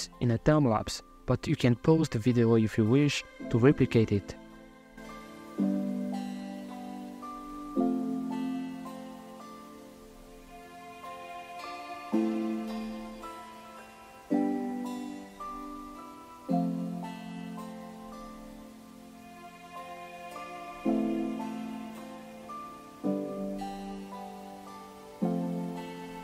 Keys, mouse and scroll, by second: 0.0 z, 0.1 middle click, 0.2 scroll up 2, 0.3 middle click, 0.4 shift+a, 0.9 middle click, 1.2 shift+a, 1.9 middle click, 2.4 click, 2.8 click, 3.1 click, 3.2 scroll down 4, 3.3 middle click, 3.5 shift+a, 4.0 shift+click, 4.3 middle click, 4.8 scroll down 3, 4.8 scroll up 2, 4.9 click, 5.0 middle click, 5.1 shift+a, 5.4 middle click, 5.5 click, 6.2 scroll up 4, 6.4 click, 6.7 middle click, 7.0 middle click, 7.1 click, 7.4 click, 8.1 scroll up 4, 8.2 scroll down 3, 8.4 middle click, 9.2 middle click, 9.4 shift+a, 9.6 scroll up 4, 9.8 middle click, 10.0 click, 10.1 click, 10.8 BackSpace, 11.6 middle click, 11.6 click, 12.0 click, 12.6 click, 13.0-13.4 scroll up 7, 13.4 scroll down 1, 13.6 middle click, 13.7 shift+a, 14.1 click, 14.3 shift+a, 14.7 click, 15.0 middle click, 15.1 scroll up 3, 15.2 middle click, 15.3 shift+click, 15.6-16.0 scroll down 8, 15.6 middle click, 16.2-16.8 scroll up 2, 16.2 middle click, 16.4 shift+a, 16.8 middle click, 16.9 click, 17.1 ctrl+shift+right click, 17.2 click, 17.4 z, 17.4 middle click, 17.6 KP_Divide, 17.6 middle click, 18.1 scroll down 2, 18.3-21.1 middle drag, 21.1 scroll down 3, 21.3-22.4 middle drag, 24.4-25.6 drag, 26.0-26.2 middle drag.